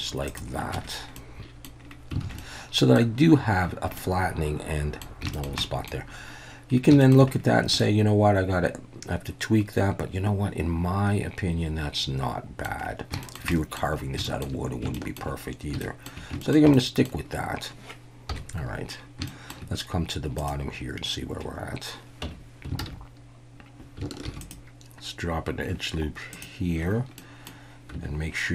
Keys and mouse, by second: 0.3 click, 0.7 Tab, 1.2-1.6 middle drag, 2.2 alt+a, 2.4-3.0 middle drag, 4.0-5.0 middle drag, 5.3 shift+middle click, 5.6 middle click, 7.0 shift+middle click, 7.8-12.7 middle drag, 13.2 shift+middle click, 13.5 middle click, 14.3 shift+middle click, 14.9 shift+click, 15.8 shift+middle drag, 16.4 shift+middle click, 16.7 middle click, 18.3 KP_1, 19.3 shift+middle drag, 22.3 Tab, 22.8 alt+a, 24.2 ctrl+r, 26.3 click, 27.2 middle click, 27.9 Tab.